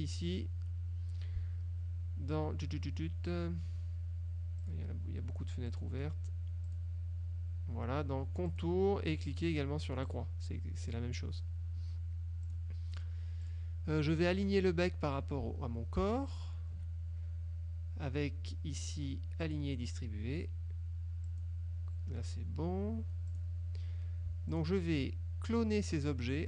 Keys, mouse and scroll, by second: 0.3 click, 4.7 click, 5.7 click, 6.8 click, 8.6 click, 10.2 click, 11.0 click, 12.6 click, 13.6 click, 16.4 shift+click, 19.5 click, 21.4 click, 23.4 click, 24.6 shift+click.